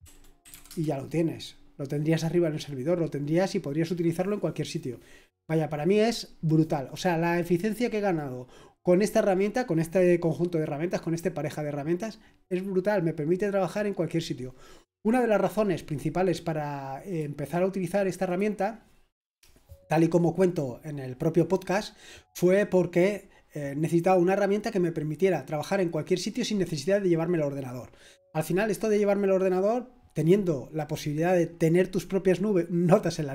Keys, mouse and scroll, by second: 0.0-1.0 typing, 17.1 click, 17.5 click, 18.2 click, 20.6-21.0 scroll down 1.